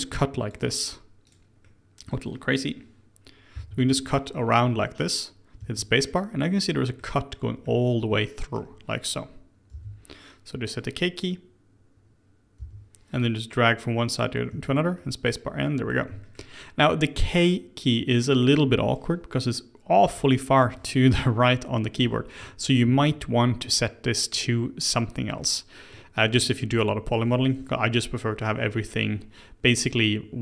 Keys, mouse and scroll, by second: 1.6-3.5 middle drag, 3.5 k, 6.0-7.2 middle drag, 7.2-7.6 scroll down 1, 7.6-9.7 middle drag, 9.7 l, 12.6 k, 15.0-16.6 middle drag, 16.6-19.7 scroll up 1, 22.8-28.5 shift+middle drag.